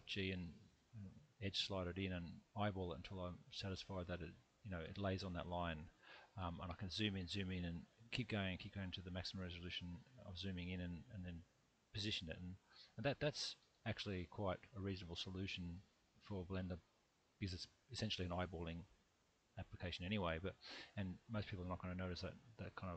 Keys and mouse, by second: 4.6 shift+click, 5.6 shift+middle click, 6.5 shift+middle click, 13.6 ctrl+z, 14.7 click.